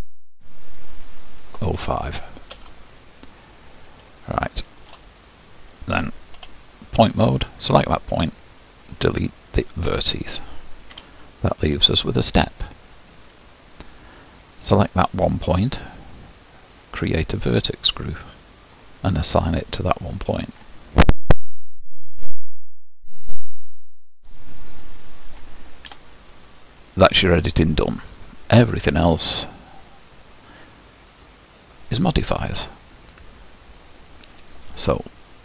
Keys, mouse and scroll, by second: 3.5-4.3 scroll up 2, 4.3-5.3 shift+middle drag, 5.3-6.4 scroll up 1, 6.4-7.5 middle drag, 6.4 1, 7.5-9.7 drag, 9.7 Delete, 11.0 a, 13.5 click, 16.9-20.4 drag, 22.7-24.4 drag, 24.4-25.9 scroll up 2, 25.9 Tab, 26.8-28.9 scroll down 4, 31.5 click, 32.5-35.1 scroll down 1.